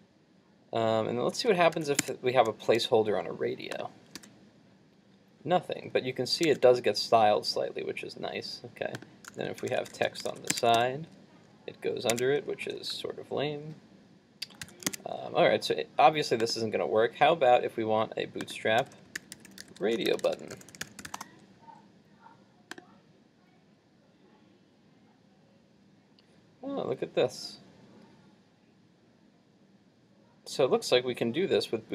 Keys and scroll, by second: 1.8 super+s, 2.1 super+Tab, 4.2 super+r, 6.6 super+Tab, 10.3 super+s, 10.6 super+Tab, 10.8 super+r, 12.2 super+Tab, 12.8 super+z, 14.7 super+s, 15.0 super+Tab.